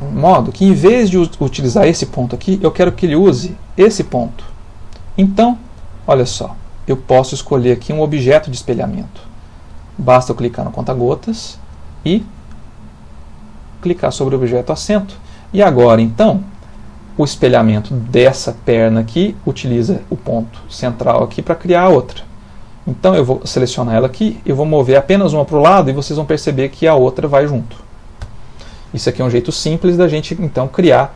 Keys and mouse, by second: 3.0 click, 5.7 click, 10.1 click, 14.2 middle click, 17.2 click, 23.7 click, 24.9 g, 28.7 middle click, 29.3 ctrl+middle click, 29.7 middle click.